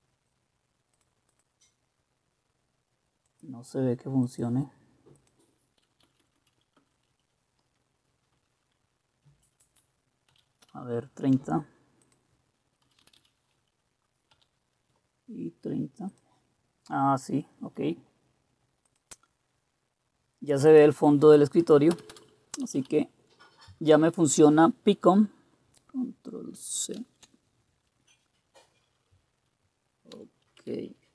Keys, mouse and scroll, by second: 6.0 Left, 6.2 Left, 6.3 Left, 6.8 Right, 7.1 Delete, 8.3 Left, 9.3 Delete, 10.3-10.7 typing, 12.6-14.3 typing, 12.9 click, 13.6 Delete, 16.9-18.6 drag, 21.9 Return, 21.9 click, 22.1 Return, 22.7 Up, 22.9 Up, 27.0 ctrl+c.